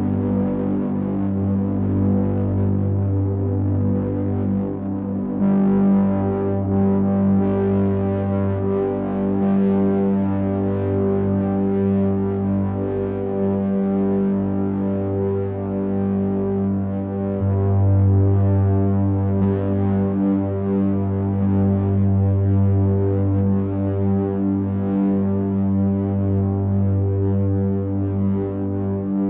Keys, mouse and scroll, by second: 1.7 KP_1, 2.5 KP_3, 7.3 click, 8.8 click, 11.8 click, 13.0 r, 19.5 click, 20.3 space, 20.6 o, 20.8 k, 23.0 click, 23.9 click.